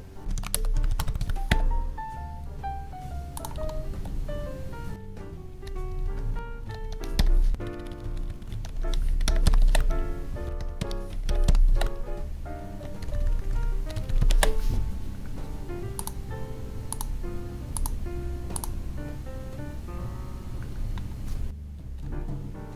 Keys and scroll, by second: 0.5 space, 4.9 Up, 6.4 Up, 6.7 Down, 6.9 Left, 7.4 ctrl+s, 7.5 Up, 8.6 Left, 9.6 ctrl+s, 10.5 Right, 11.7 ctrl+s, 13.0 ctrl+Down, 22.0 Down.